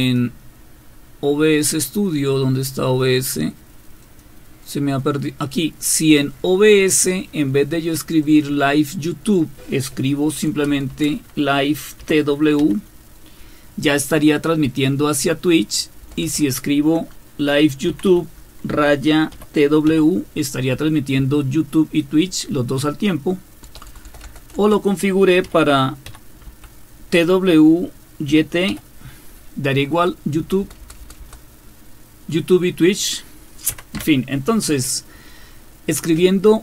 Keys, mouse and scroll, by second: 0.0 click, 4.0 click, 8.2 click, 10.7 BackSpace, 10.9 BackSpace, 12.0-12.6 typing, 16.0 BackSpace, 16.4 BackSpace, 17.6-19.9 typing, 23.6-26.5 typing, 28.3-28.7 typing, 30.4-31.0 typing, 33.5-34.4 typing.